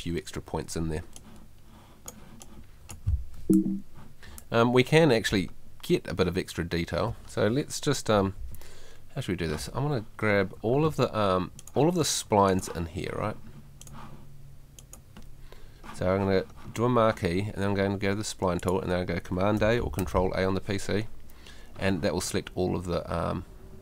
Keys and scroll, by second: 3.4 F2.